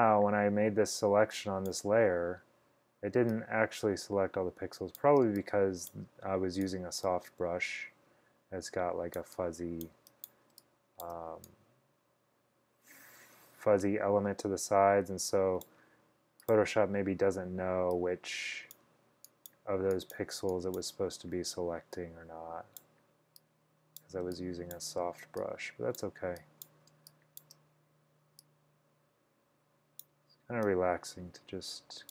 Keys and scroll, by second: 5.3-6.1 typing, 10.6 space, 11.1 space, 24.3 space, 24.8 space, 27.0 space, 27.5 space.